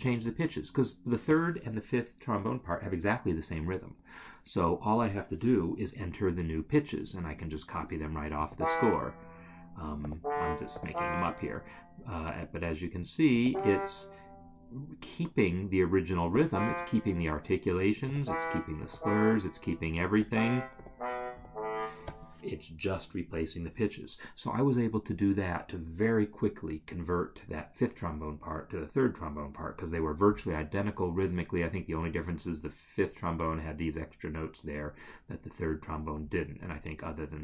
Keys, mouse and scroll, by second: 8.4 e, 10.3 d, 10.7 e, 13.3 g, 16.3 e, 18.0 f, 18.8 r, 20.1 c, 20.8 b, 21.3 a.